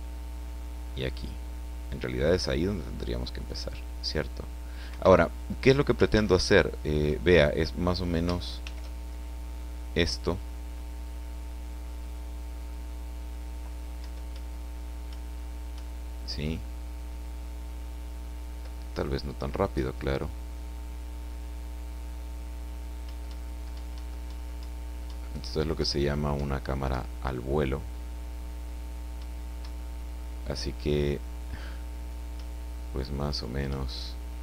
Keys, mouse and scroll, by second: 4.9 Escape, 6.1 ctrl+z, 8.6 shift+f, 10.4 scroll up 1, 11.0-11.7 scroll up 2, 12.0 scroll up 2, 14.0 Up, 15.1 Up, 23.0 Up, 29.2 Up, 32.3 Up.